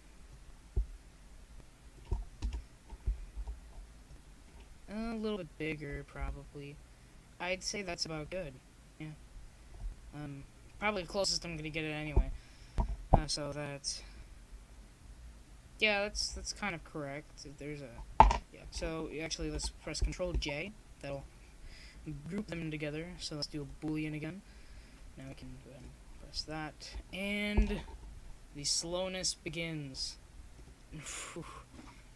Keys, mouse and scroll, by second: 2.6-6.6 drag, 3.4 x, 5.8 m, 9.4 m, 11.9 m, 13.2 click, 13.3 middle click, 15.6 middle click, 16.2-17.9 right drag, 18.5 m, 20.8-25.2 drag, 22.4 KP_0, 25.3 click, 25.8 r, 30.5 s.